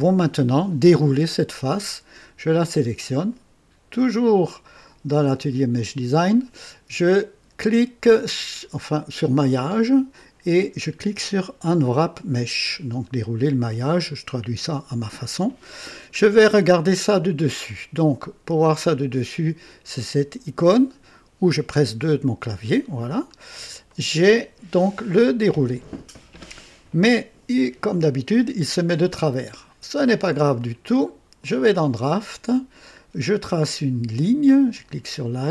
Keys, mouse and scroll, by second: 4.1 click, 5.7 click, 9.3 click, 13.8 click, 16.2 scroll down 2, 21.9 KP_2, 23.2-23.6 scroll up 2, 23.8-24.9 right drag, 30.5 click, 31.3 click, 34.7 click.